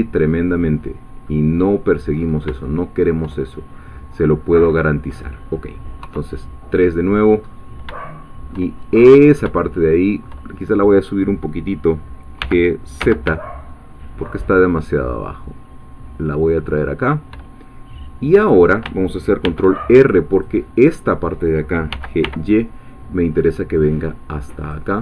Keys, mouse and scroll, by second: 1.1 scroll down 2, 1.3 middle click, 2.1-2.5 scroll up 3, 2.6 shift+middle click, 3.5 shift+scroll down 2, 3.9-6.0 middle drag, 6.0 3, 7.1-7.7 scroll up 2, 8.0 shift+middle click, 8.8 shift+scroll up 1, 9.6 shift+middle click, 12.4 g, 13.0 z, 17.0 shift+click, 19.4 ctrl+r, 20.0 ctrl+click, 20.9 click, 21.9 g, 22.2 y, 24.6-25.0 drag.